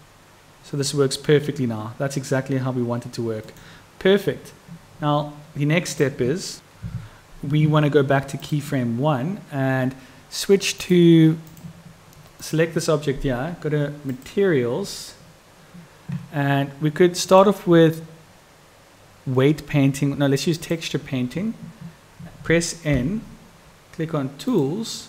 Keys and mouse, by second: 5.9 click, 8.5 click, 11.0 click, 12.5 click.